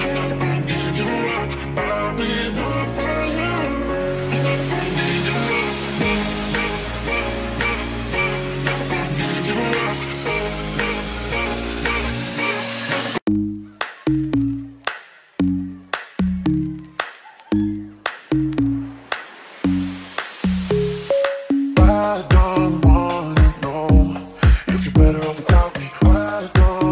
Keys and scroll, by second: 10.3 q, 22.5 space.